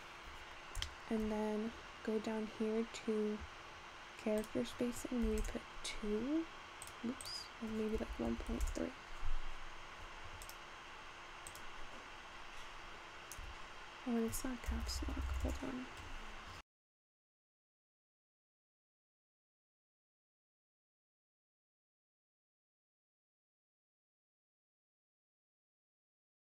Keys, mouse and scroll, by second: 0.0-0.5 scroll down 1, 0.5-1.0 scroll down 1, 1.0 shift+middle click, 1.9-2.5 scroll down 8, 2.5-3.9 scroll up 1, 3.9 scroll up 1, 3.9-4.6 scroll down 5, 4.6-10.3 drag, 10.4 click, 11.4 click, 13.7 Tab, 14.8-15.5 BackSpace, 18.0 r, 19.4-20.2 typing, 21.3 Tab, 23.2 click, 23.9-26.0 middle drag, 26.0-26.6 scroll up 4.